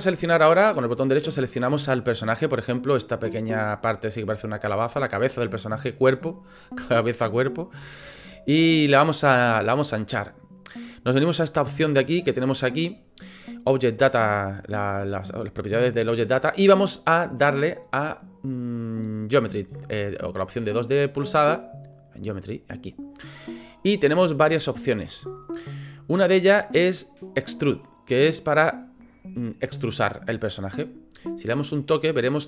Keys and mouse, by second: 0.8 middle click, 1.3-4.2 middle drag, 7.9 shift+middle click, 9.5 middle click, 14.5-22.0 middle drag.